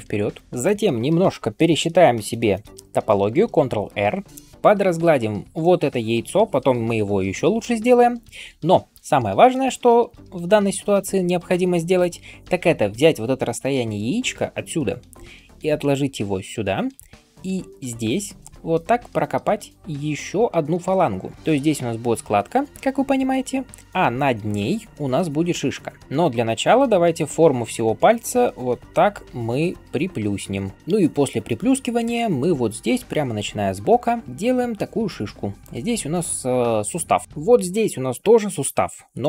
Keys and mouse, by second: 4.2 ctrl+shift+r, 17.8 [, 17.8 [, 18.0 [, 26.3-26.6 ], 26.8 ], 26.8 ], 31.9 [, 32.0 [.